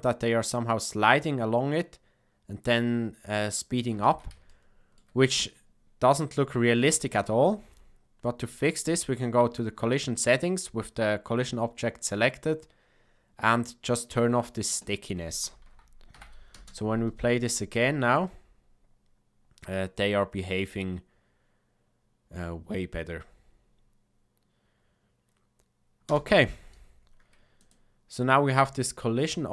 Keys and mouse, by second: 3.9 space, 4.4-4.9 shift+middle drag, 6.9 shift+middle click, 14.0 click, 16.1 shift+Left, 16.5 space, 26.2 space, 27.5 click.